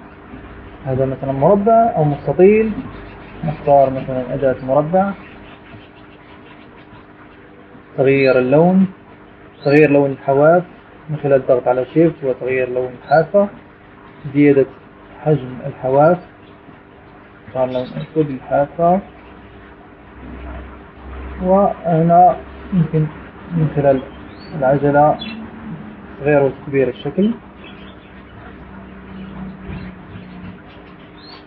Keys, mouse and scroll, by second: 1.0 click, 2.7-3.9 drag, 4.5-6.4 drag, 7.4-8.8 drag, 10.5 click, 14.2 shift+click, 16.5-16.8 scroll up 2, 17.2-17.9 scroll up 4, 19.1 shift+click, 21.1-21.5 scroll up 2, 21.8 scroll down 2, 24.0-24.3 scroll up 2, 24.6-25.1 scroll down 2, 25.6 scroll up 2, 28.2-28.5 scroll up 2, 29.9-30.3 scroll down 2, 30.6 scroll down 2.